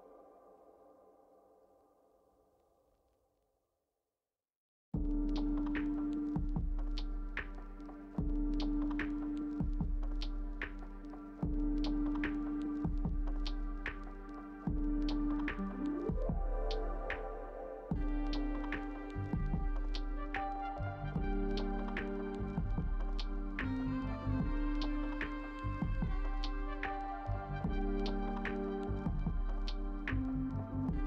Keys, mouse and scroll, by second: 26.1 double click.